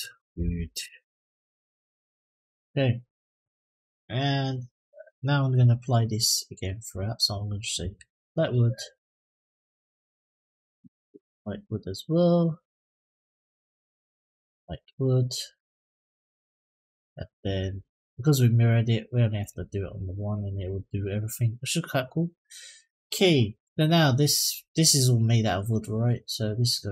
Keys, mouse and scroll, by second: 0.9 o, 6.4 click, 7.3-8.3 drag, 8.8 click, 10.2-12.2 drag, 13.2 click, 14.6 click, 16.0 click, 17.4 click, 19.1 click, 20.3 click, 24.2 click, 26.1 click.